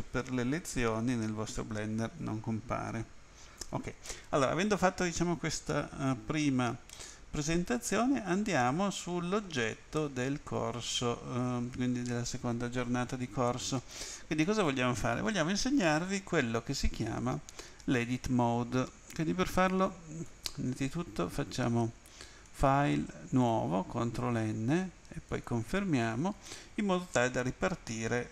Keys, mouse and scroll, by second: 6.9 middle click, 10.0 middle click, 19.5 click, 20.2 click, 22.4 click, 23.4 click, 25.3 click.